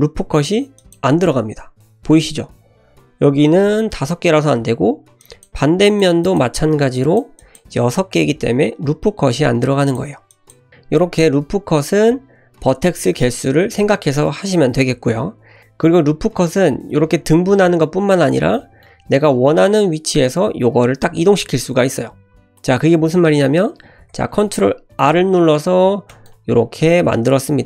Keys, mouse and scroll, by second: 5.2 click, 5.9 shift+click, 6.2 shift+click, 7.0 shift+drag, 7.4 shift+click, 9.9 click, 10.3-10.7 drag, 10.7 g, 11.8 g, 15.6 shift+middle click, 16.5 Tab, 17.2 ctrl+r, 18.5-18.9 middle drag, 24.0 ctrl+r.